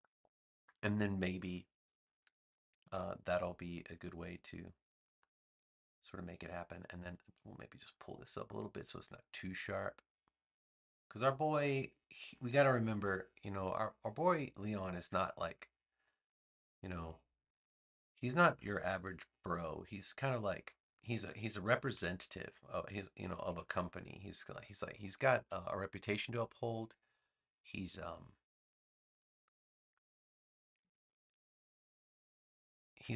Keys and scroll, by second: 2.8 a, 21.9 v, 23.3 super+c, 23.6 super+v, 30.7 a.